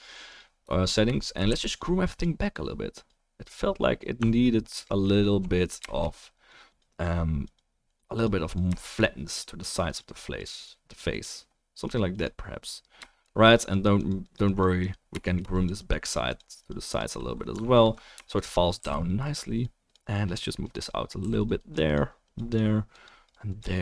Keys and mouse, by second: 1.1-1.6 shift+middle drag, 1.4 f, 1.6-2.0 drag, 4.7 middle click, 5.0 middle drag, 5.8-6.8 shift+middle drag, 6.1-6.8 drag, 6.1-6.8 right drag, 15.1-17.7 shift+drag, 15.1-17.7 shift+middle drag, 15.1-17.7 shift+right drag, 17.8 alt+middle click, 18.0 middle click, 19.4 f, 21.2 f, 21.4 click.